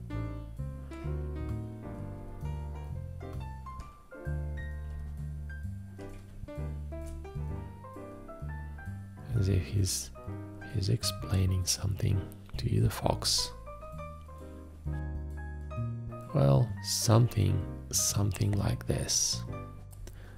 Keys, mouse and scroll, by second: 19.8 space.